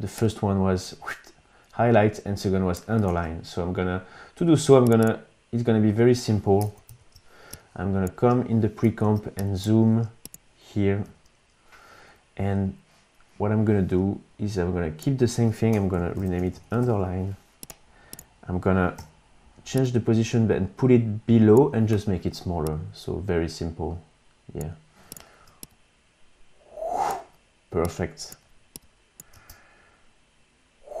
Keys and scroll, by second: 3.1 super+Tab, 6.7 super+=, 6.9 super+=, 7.5 space, 9.0 super+=, 9.4 space, 11.1 u, 15.7 Return, 15.9-17.2 typing, 19.0 p, 29.3 space.